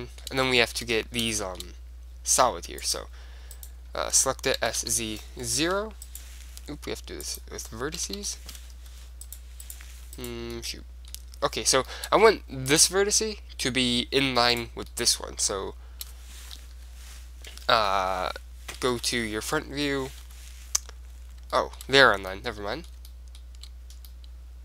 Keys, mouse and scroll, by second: 2.9 click, 2.9 right click, 3.1 middle click, 3.3 click, 3.7-4.8 middle drag, 4.8 right click, 4.8 s, 6.3-7.4 right drag, 7.4 middle click, 8.2 click, 8.2 s, 9.8-12.0 right drag, 10.7-13.8 middle drag, 13.8 right click, 14.7 right click, 15.0-16.9 middle drag, 16.9 KP_3, 18.0 KP_1, 18.2 KP_0, 19.0 KP_1, 19.4-21.2 middle drag, 20.4 KP_5, 21.7-24.6 middle drag.